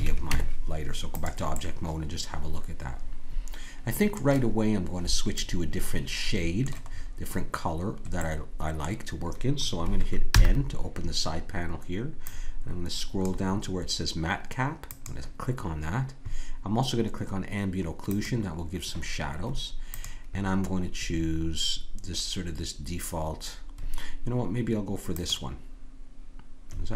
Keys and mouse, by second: 0.2 Tab, 5.0-10.3 middle drag, 10.3 n, 12.2-19.8 drag, 19.9-23.9 drag.